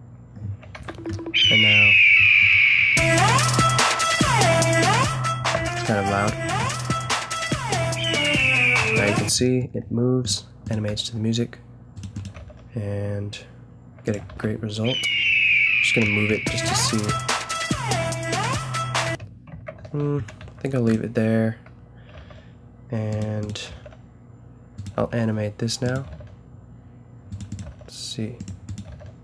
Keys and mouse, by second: 0.8 alt+a, 9.2 Escape, 9.9 a, 10.9 g, 12.3 g, 14.3 alt+a, 19.0 Escape, 19.8 ctrl+z, 20.4 a, 20.8-22.1 drag, 22.1 g, 23.4 drag, 23.7 g, 25.0 g, 25.8-27.5 middle drag, 26.0 g, 27.6 g, 28.8 g.